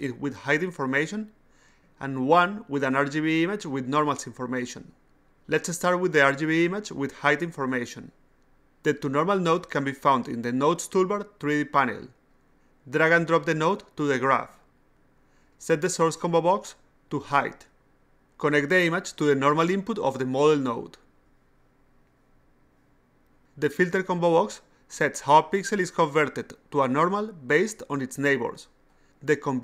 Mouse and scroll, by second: 3.3 click, 3.5 click, 7.2 click, 7.4 click, 8.9 click, 13.1-14.4 drag, 16.8 click, 17.5 click, 19.1-20.7 drag, 22.9 click, 23.8 click, 25.0 click, 26.3 click, 27.3 click, 28.7 click.